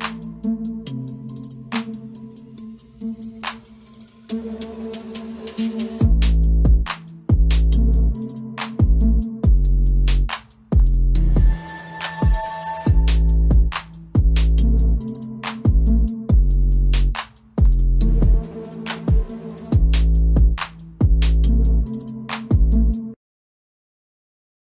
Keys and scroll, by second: 7.4-8.7 typing, 9.8-12.9 typing.